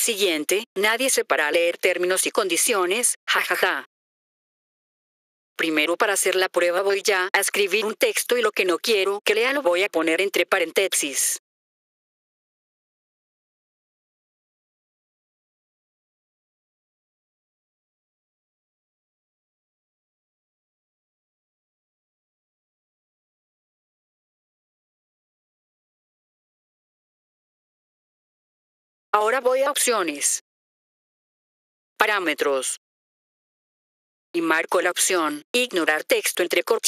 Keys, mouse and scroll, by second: 3.6 click, 5.0 click, 8.3 click, 11.5-25.3 typing, 28.1 F4, 29.0 click, 30.6 click, 33.1 click, 35.7 click.